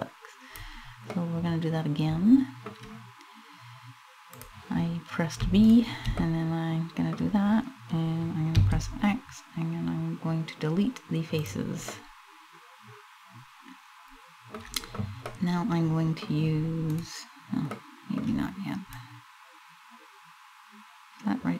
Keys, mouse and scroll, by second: 0.8 middle click, 3.9 click, 5.2 shift+right click, 5.8 middle click, 8.2 x, 11.6 middle click, 14.9 middle click, 16.7 right click, 17.4 middle click, 18.6 click.